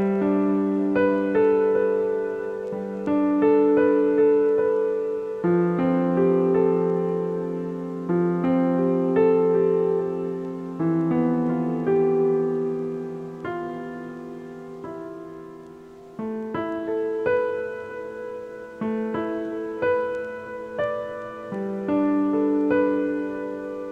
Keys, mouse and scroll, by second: 0.3 click, 1.9 click, 2.7 click, 6.7 click, 9.1-9.6 drag, 9.6-10.0 scroll up 5, 10.3 middle click, 10.9-11.9 scroll up 7, 11.9 click, 17.2 click, 18.7 click, 19.9 click, 21.5 click, 22.4-23.7 drag.